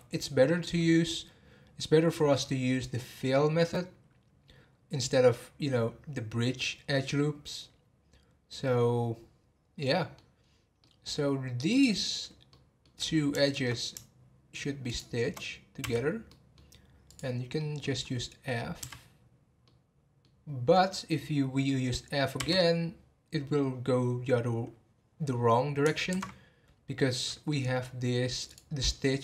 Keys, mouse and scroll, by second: 9.8 middle click, 10.4 scroll up 1, 10.8 middle click, 11.7 click, 12.5 middle click, 13.0 scroll up 3, 13.4-14.9 shift+middle drag, 14.9 shift+click, 15.8 f, 16.2 scroll down 1, 16.3 middle click, 17.0 click, 17.3 scroll down 3, 17.5 middle click, 18.0-18.8 scroll up 1, 18.8 f, 19.6-22.4 middle drag, 22.4 f, 27.0 scroll up 2, 27.5-28.5 middle drag, 28.5 click, 28.9-29.2 middle drag.